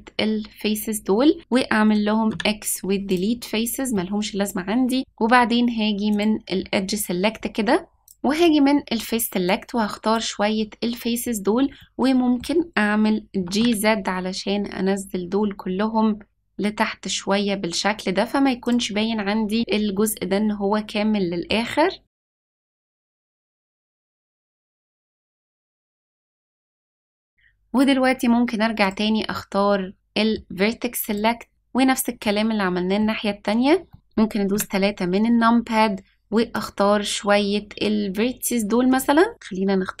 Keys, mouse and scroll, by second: 2.2 x, 3.9-5.0 middle drag, 6.1-8.1 drag, 8.3 click, 9.4 click, 11.7 middle click, 13.4 g, 19.6 click, 19.9-21.5 middle drag, 22.0 middle click, 22.5-23.0 scroll up 3, 23.1 ctrl+z, 23.2 ctrl+z, 23.5 click, 23.6 scroll down 3, 23.8 middle click, 24.0 g, 25.2 middle click, 25.7 click, 25.9 middle click, 28.8 click, 29.9 middle click, 31.1 click, 32.2 middle click, 33.9 middle click, 34.5 KP_3, 35.1-36.5 scroll up 2, 36.5-38.4 drag, 39.3-40.0 drag.